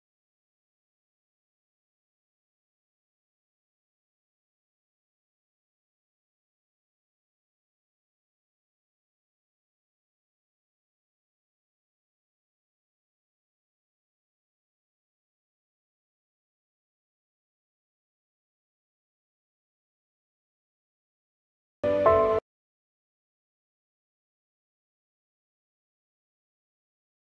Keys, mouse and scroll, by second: 1.3-6.1 right drag, 6.1 scroll up 1, 6.8-7.3 scroll down 1, 7.3 right click, 8.2 scroll down 1, 8.6 right click, 9.6 scroll up 1, 10.2 right click, 12.6 click, 15.1 right click, 15.1 shift+right click, 16.4 click, 21.9 F1.